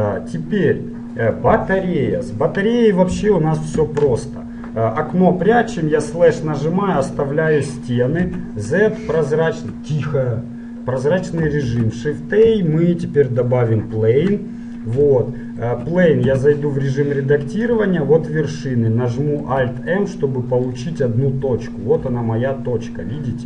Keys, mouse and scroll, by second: 3.9-5.8 right drag, 5.8 KP_Divide, 7.1 KP_1, 8.4 z, 8.7 middle click, 13.3 shift+a, 16.3 Tab, 17.7-19.5 drag, 19.5 alt+m, 22.3 g.